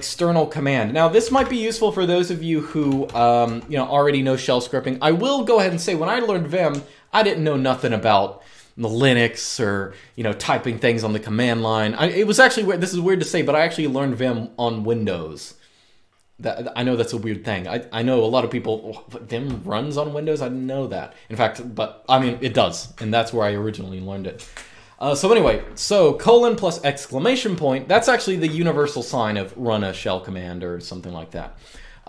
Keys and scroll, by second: 0.9 typing, 2.4-3.2 typing.